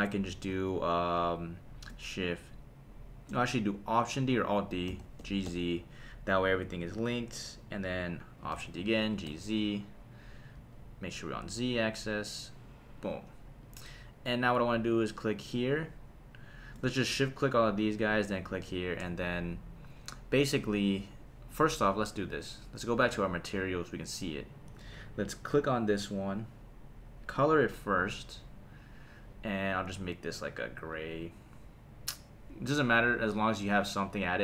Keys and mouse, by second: 4.9 alt+d, 5.2 g, 5.5 z, 7.7 click, 8.5 alt+d, 9.0 g, 10.5 z, 13.0 click, 13.6 click, 15.1 click, 17.1 shift+click, 17.8 shift+click, 18.5 shift+click, 23.2 click, 24.3 click, 26.3 click, 27.3-28.4 drag, 29.7 click, 33.3 click.